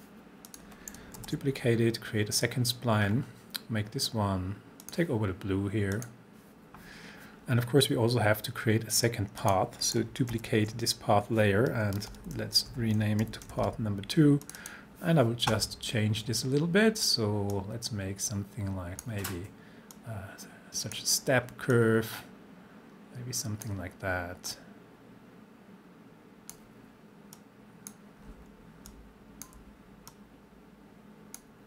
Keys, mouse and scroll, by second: 0.5 click, 1.2 ctrl+d, 3.1 scroll down 1, 4.8 click, 9.4 click, 10.3 ctrl+d, 12.1 Return, 12.7 Right, 13.5 2, 13.7 Return, 14.4 click, 17.6-19.1 drag.